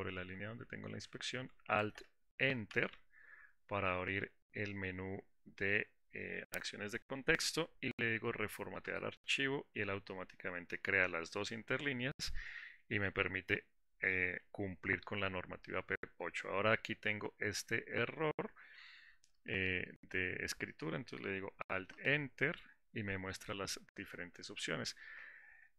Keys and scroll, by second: 3.4 alt+Return, 22.7 alt+Return.